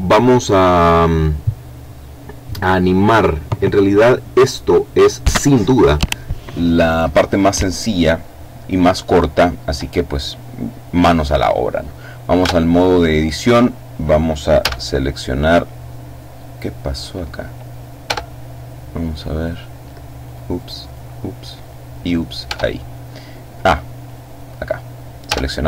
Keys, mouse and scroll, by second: 14.5 a, 17.9 Tab, 19.0 right click, 20.1-21.3 right drag, 21.5 right click, 22.3 Tab, 23.9 click, 25.1 a.